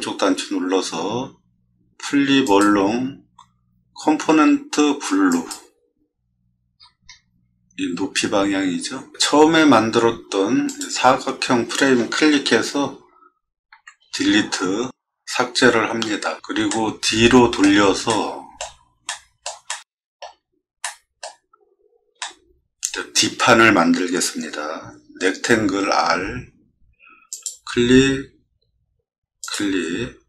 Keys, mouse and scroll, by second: 2.4 click, 5.3 click, 6.7 middle click, 6.7-7.2 scroll down 2, 7.1 middle click, 8.9 middle click, 10.6 click, 16.7 middle click, 18.0-18.5 middle drag, 19.0 middle click, 19.7-20.2 shift+middle drag, 20.3 middle click, 20.3 middle click, 20.8 middle click, 21.5 scroll up 1, 22.2-22.9 shift+middle drag, 25.9 r, 27.3 click, 29.4 click.